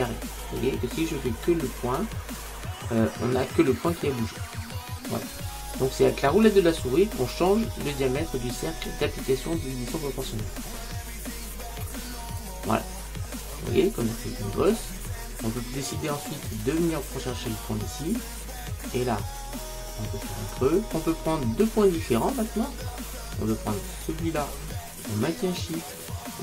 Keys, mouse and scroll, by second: 13.5-15.2 middle drag, 16.6-18.5 right drag, 18.2 click, 21.9-22.4 scroll down 1, 22.4-24.0 middle drag, 24.0-26.4 right drag.